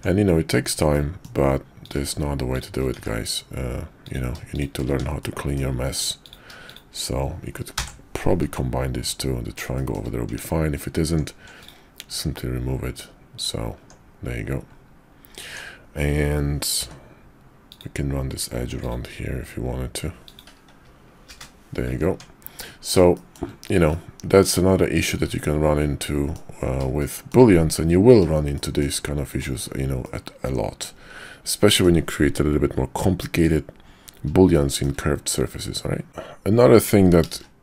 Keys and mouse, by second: 0.9 click, 1.8 click, 2.5 shift+click, 2.9 1, 4.0 click, 4.8 1, 5.2 click, 6.2 click, 6.6 shift+click, 7.7 j, 8.4 Tab, 9.7 shift+middle click, 10.3 Tab, 11.0 Tab, 12.1 x, 13.8 Tab, 15.5 Tab, 16.7 k, 22.1 Tab, 23.1 shift+middle drag, 23.8-26.4 middle drag, 27.0-27.3 shift+middle drag, 28.5 shift+middle drag, 30.0-31.8 middle drag, 34.5 shift+middle click, 35.2-36.1 middle drag, 36.1 shift+a, 37.3 shift+a.